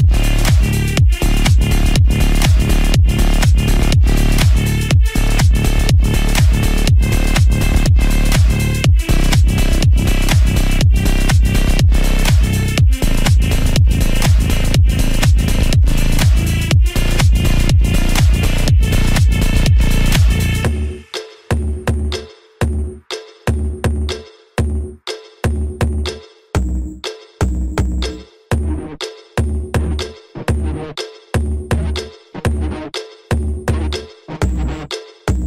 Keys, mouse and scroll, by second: 0.9 ctrl+click, 4.0 ctrl+click, 4.3 ctrl+shift+i, 6.1 click, 8.8 click, 11.0-12.9 typing, 13.9-14.6 typing, 15.2 click, 15.8-17.5 typing, 23.1 scroll up 1, 23.9-25.6 drag, 25.6 scroll down 1, 26.2-30.3 drag, 30.3 ctrl+d, 31.9-33.5 typing.